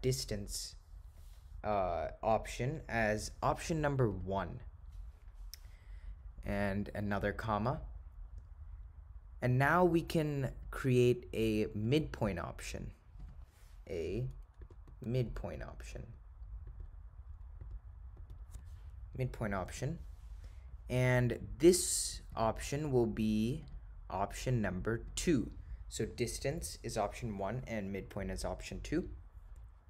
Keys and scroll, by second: 4.2 1, 7.1 ,, 14.3 /, 15.9-16.6 typing, 18.3 4, 23.7 ,, 25.1 2.